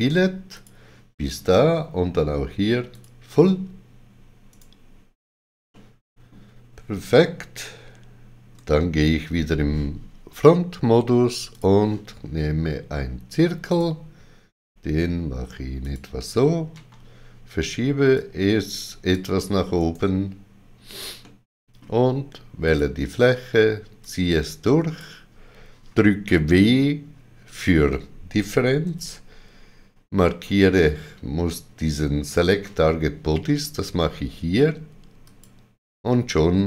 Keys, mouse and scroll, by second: 0.5 shift+click, 2.9 click, 4.5 right click, 5.7 middle click, 11.5 click, 13.7 click, 15.8 click, 16.7 g, 18.1 click, 19.8 right click, 21.2 middle click, 22.6 click, 24.0 click, 28.8 click, 28.8 w, 35.3 click.